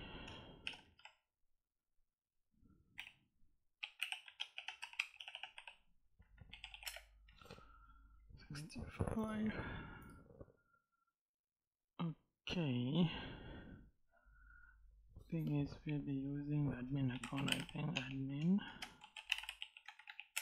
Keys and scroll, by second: 0.0-0.8 typing, 2.8-6.3 typing, 6.7 Return, 16.7-19.9 typing, 20.1 Return.